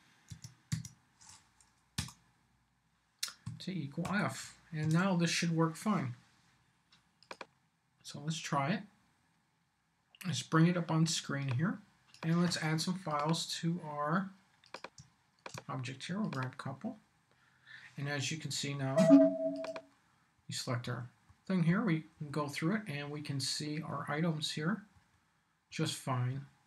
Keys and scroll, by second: 0.1 Tab, 2.0 Return, 3.4 =, 4.0 f, 4.8 super+s, 18.5 Down, 20.4 Down, 24.9 Down.